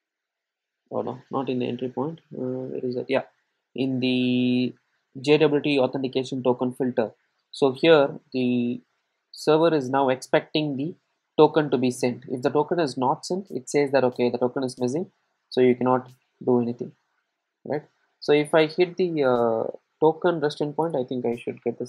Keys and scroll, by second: 5.0 ctrl+shift+super+F12.